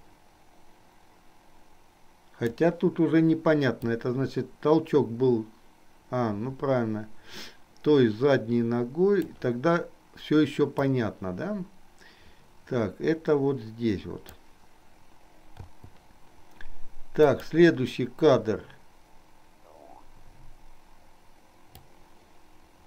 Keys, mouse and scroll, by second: 4.1-9.6 drag, 11.1-14.8 drag, 15.9 i, 17.3 click, 21.9-22.8 drag.